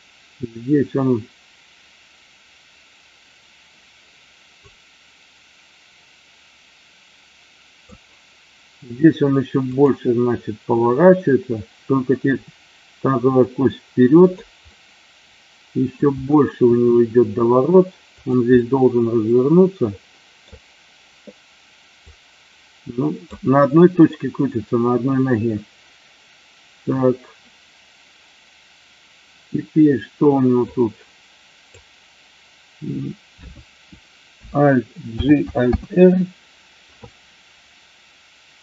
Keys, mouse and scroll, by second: 4.7-8.0 drag, 12.2 r, 14.2 click, 14.6-16.0 middle drag, 18.2 click, 18.6-20.5 middle drag, 22.0-23.2 drag, 30.7-31.7 drag, 35.1 alt+g, 35.6 alt+r.